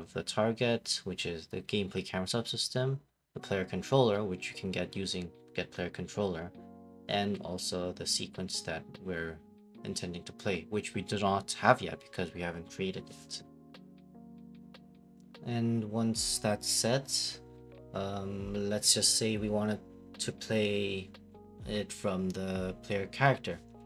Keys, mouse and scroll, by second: 0.6 click, 2.0 click, 4.0-5.7 typing, 7.2 click, 7.7 right click, 8.5 click, 10.6 right click, 11.9 click, 12.1-13.2 typing, 14.3 click, 14.3-15.6 typing, 15.6 click, 15.7-16.1 scroll down 6, 15.9 right click, 16.4 right click, 16.9 click, 17.2 click, 17.7 right click, 21.1 click, 21.7 click, 22.1 click, 22.6 click, 22.7 right click, 23.5 click, 23.7-23.8 typing.